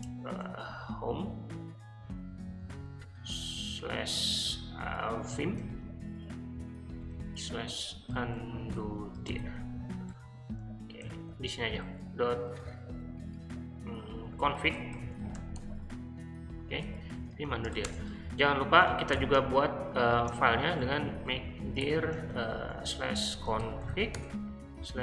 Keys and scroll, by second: 0.3 /, 2.7 ., 5.0-6.0 typing, 7.1-11.8 typing, 10.1 Return, 14.2-16.0 typing, 16.8 Escape, 17.2-17.9 typing, 19.1-25.0 typing.